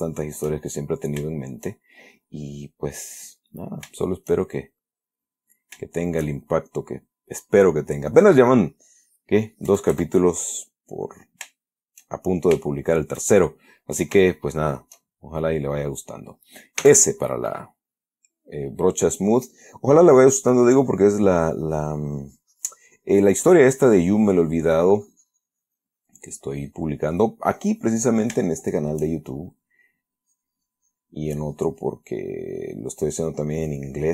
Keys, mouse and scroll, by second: 0.3-1.5 shift+middle drag, 1.6-3.9 shift+middle drag, 4.0-5.5 shift+middle drag, 5.8-7.6 shift+middle drag, 10.0 KP_Add, 10.7-11.5 middle drag, 11.9-13.0 shift+drag, 13.5 shift+click, 14.3 shift+click, 15.5-16.9 shift+drag, 17.1 s, 19.8 middle click, 20.5-28.2 drag, 28.3-28.8 middle drag, 28.9-29.4 shift+middle drag, 29.5 shift+middle click, 30.5-34.1 drag.